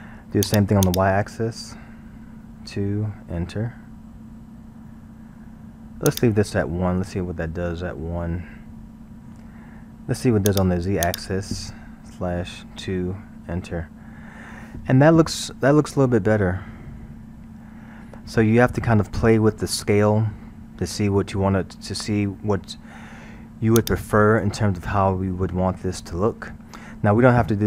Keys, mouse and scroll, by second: 0.5-3.5 drag, 6.1-9.1 drag, 10.5-13.5 drag, 14.3-15.0 scroll, 21.3-23.1 scroll, 23.8-25.1 drag, 25.1-25.7 scroll.